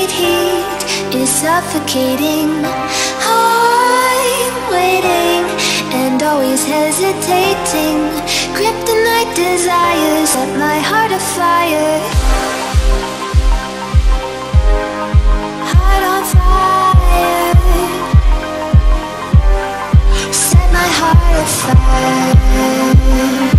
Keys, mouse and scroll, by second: 0.1 space, 0.3 click, 0.5-0.9 space, 5.4 click, 7.0 ctrl+=, 7.6 click, 7.8 space, 8.7 ctrl+=, 10.3-11.3 alt+drag, 12.1 ctrl+-, 13.9-14.3 click, 14.5 space, 14.7 click, 14.9-15.5 space, 15.9-16.6 alt+drag, 18.6 space, 18.8 click, 19.0-19.5 space, 19.9 click, 20.2 space, 21.6 click.